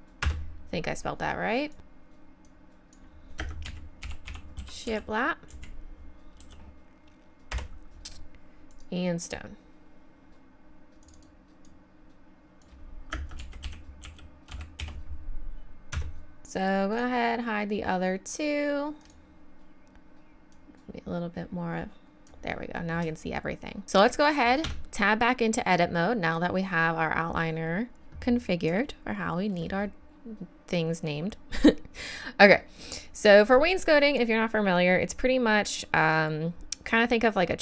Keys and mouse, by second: 1.7 right click, 1.8-3.8 drag, 8.7-10.5 right drag, 18.6 click, 19.0-20.2 drag, 24.7 Tab, 30.6 middle click.